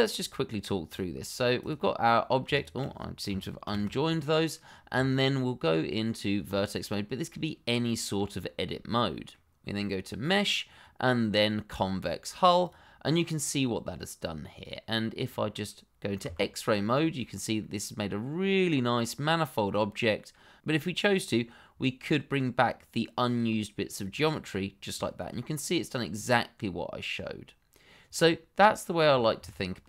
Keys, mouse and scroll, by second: 0.8 click, 2.5 shift+click, 2.6 click, 3.6 ctrl+j, 4.9 Tab, 8.1 middle click, 10.2 click, 12.6 click, 13.1 middle click, 16.2 shift+z, 16.7 shift+middle click, 17.2-17.6 scroll up 1, 17.6 middle click, 24.0 click, 24.6-24.9 scroll down 1, 25.0 shift+middle click, 25.4 middle click, 29.3 ctrl+z.